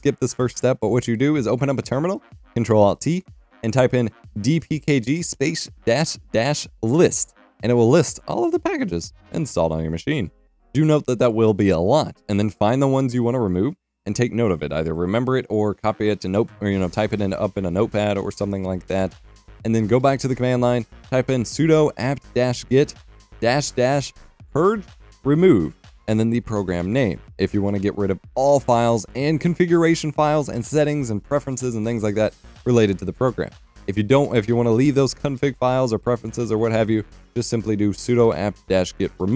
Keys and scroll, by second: 0.0-0.9 typing, 16.9 F12, 22.9 F12, 23.3-28.4 typing, 29.7-39.3 typing.